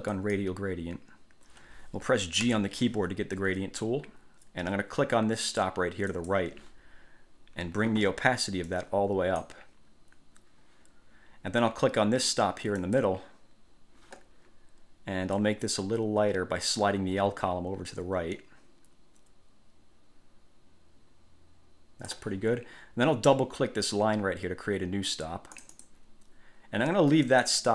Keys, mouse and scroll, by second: 0.3 click, 2.6 g, 6.2 click, 8.8-9.7 drag, 12.9 click, 15.5-22.5 drag, 25.8 click, 27.4 click.